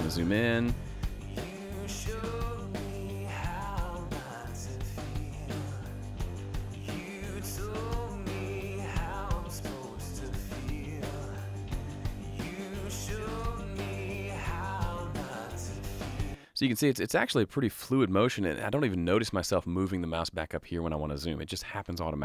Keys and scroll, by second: 16.2 space.